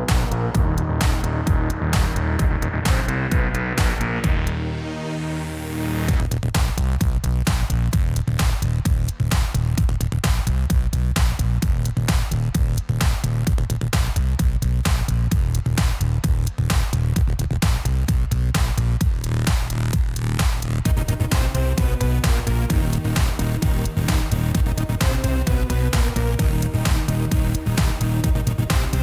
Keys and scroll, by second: 11.4 Tab, 18.7 ctrl+b, 25.5 ctrl+b.